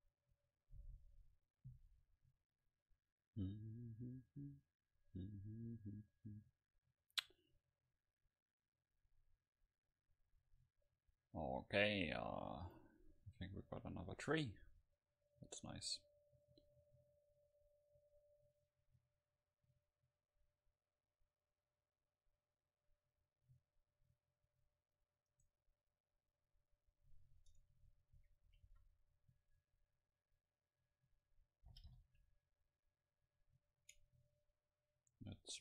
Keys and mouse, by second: 0.8-4.8 middle drag, 14.8-18.0 middle drag, 20.2-26.8 middle drag, 25.4-27.7 right drag, 27.8 Tab, 28.3 a, 28.7 a, 28.8 a, 29.6-32.8 drag, 31.9 g, 33.9-35.6 drag, 34.0 Tab.